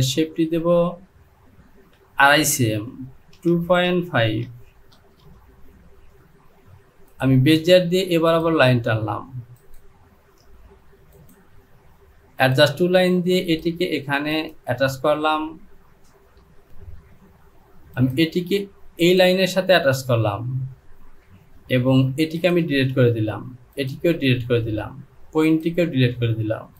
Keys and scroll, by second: 3.4 KP_2, 3.9 KP_Decimal, 5.0 KP_5, 5.0 e, 22.2 Delete.